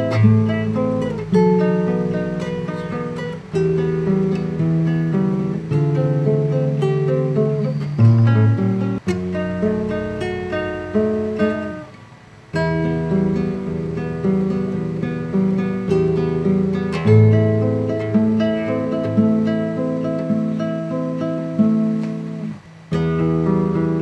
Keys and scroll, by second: 0.3 shift+o, 0.7 shift+t.